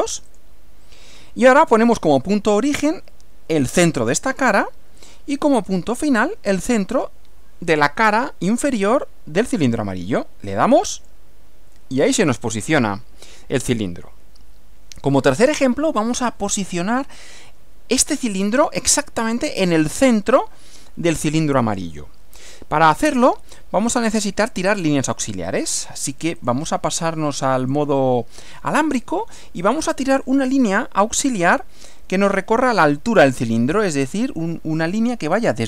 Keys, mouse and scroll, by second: 0.3 click, 4.3 click, 11.0 click, 26.4 click, 27.6 click, 30.5 click.